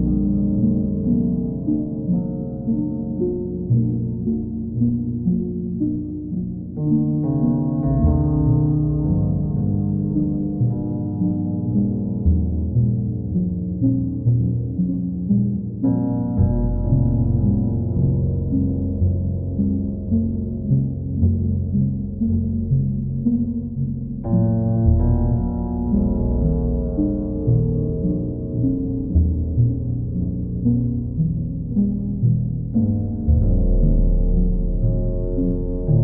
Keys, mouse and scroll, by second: 1.1 ctrl+click, 2.0 ctrl+click, 4.1 click, 5.7 alt+click, 6.9 alt+click, 8.1 ctrl+click, 8.9 ctrl+click, 9.8 alt+click, 12.1 ctrl+click, 12.6 ctrl+click, 14.9 click, 15.1 ctrl+z, 15.6 ctrl+click, 23.3 ctrl+click, 23.8 ctrl+click, 27.2 click, 28.1 ctrl+click, 29.3 ctrl+click, 30.5 ctrl+click, 31.0 ctrl+click, 35.0 click.